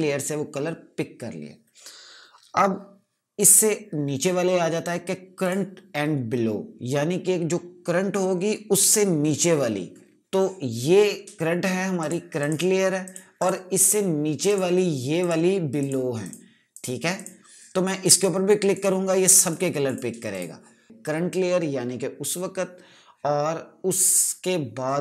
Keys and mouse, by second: 3.9 click, 12.5 click.